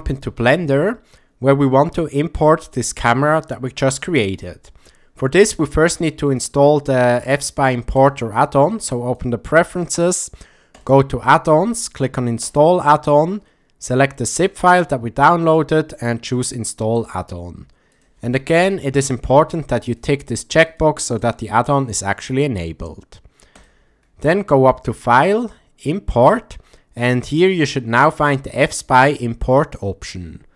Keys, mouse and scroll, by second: 6.4-8.1 drag, 25.2-30.5 drag.